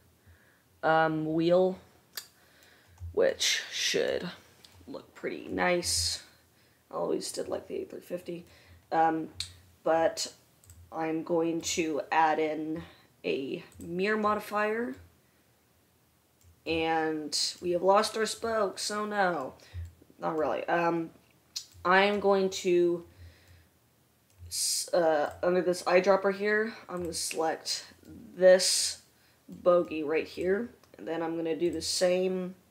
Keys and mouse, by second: 10.9-25.6 drag, 25.6-32.1 middle drag, 32.1-32.7 drag.